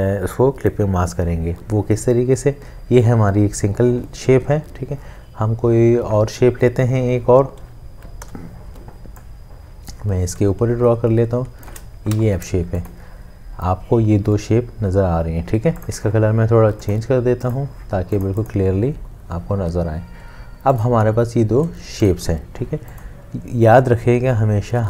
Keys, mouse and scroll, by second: 8.3 l, 10.5 shift+click, 12.1 v.